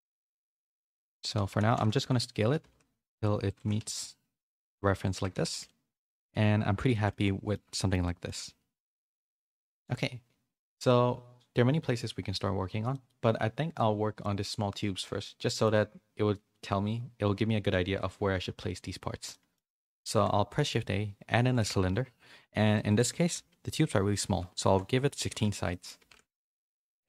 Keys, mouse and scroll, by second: 0.1 middle click, 0.6 click, 0.8 Tab, 1.0 middle click, 1.4 a, 1.6 s, 2.6 s, 3.5 g, 5.1 Tab, 5.5 a, 5.6-6.8 middle drag, 6.9 shift+middle click, 7.2 middle click, 7.7 shift+middle click, 8.0 middle click, 9.1 middle click, 12.9 middle click, 15.5 middle click, 19.3 middle click, 20.0 shift+a, 22.8-25.1 drag, 25.6 middle click.